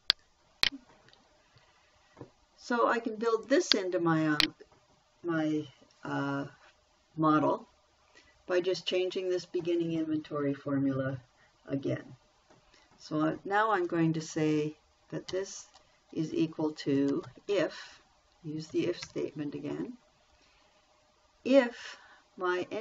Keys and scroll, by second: 15.7 =, 17.3-18.2 typing, 19.5 shift+9.